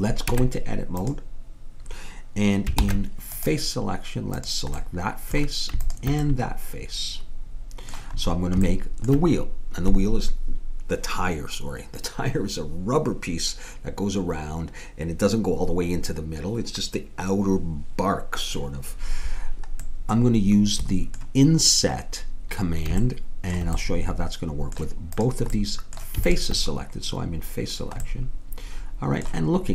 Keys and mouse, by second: 0.3 Tab, 2.8 ctrl+Tab, 4.4 click, 19.9-26.4 middle drag, 25.2-28.1 drag.